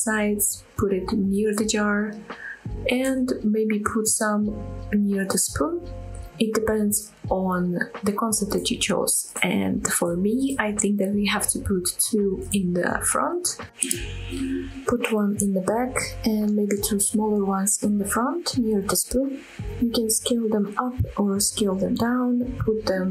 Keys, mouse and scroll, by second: 0.1-3.7 typing, 0.2 click, 0.3 middle click, 0.5 middle click, 0.9 click, 1.0 middle click, 1.4-1.7 scroll up 3, 1.5 shift+middle click, 1.9 click, 2.7 click, 2.8 shift+middle click, 2.9 click, 3.3 click, 3.4 middle click, 3.7 click, 4.4 shift+click, 4.8 click, 4.8 middle click, 5.0-6.3 typing, 5.5 click, 5.5 middle click, 5.7 shift+middle click, 5.8 scroll up 2, 5.8 shift+middle click, 6.6 click, 6.7 shift+middle click, 6.9 scroll down 1, 7.0 shift+click, 7.1 middle drag, 7.4 shift+d, 7.7 click, 7.8-8.3 right drag, 8.5-11.9 typing, 8.6 scroll up 2, 8.6 shift+middle click, 9.4 click, 10.2 click, 10.3 click, 10.5 shift+click, 10.7 click, 11.3 click, 11.3-11.7 middle drag, 11.5 scroll down 1, 11.7 click, 11.8 shift+click, 11.8 middle click, 12.7 shift+click, 12.7-13.4 shift+middle drag, 12.8 scroll up 2, 13.2 click, 13.4-15.5 typing, 13.8 click, 13.8 middle click, 13.9 scroll up 1, 14.0 middle drag, 14.2 click, 14.2 middle click, 14.8 click, 14.9 middle click, 15.0 scroll down 1, 15.0 middle click, 15.5 click, 15.5 middle drag, 15.6 scroll down 2, 15.6 middle click, 15.7 click, 15.8 shift+middle click, 15.8 scroll up 2, 15.9 scroll down 1, 16.1 middle click, 16.3 scroll up 1, 16.6 shift+click, 16.7 r, 16.7 z, 16.9 shift+click, 16.9 KP_7, 17.1 g, 17.3 middle drag, 17.4 scroll down 3, 17.5 click, 17.6 middle click, 17.8 scroll up 2, 17.8 middle click, 18.0 middle click, 18.1-18.6 scroll down 2, 18.3-23.1 typing, 18.6 right click, 18.7 ctrl+z, 18.8 middle click, 19.0 shift+click, 19.1 middle click, 19.6 click, 19.8 click, 20.0 click, 20.0 middle click, 21.0 click, 21.1 middle click, 21.5 click, 21.6 shift+middle click, 21.6 scroll up 2, 22.3 shift+click, 22.5 shift+middle click.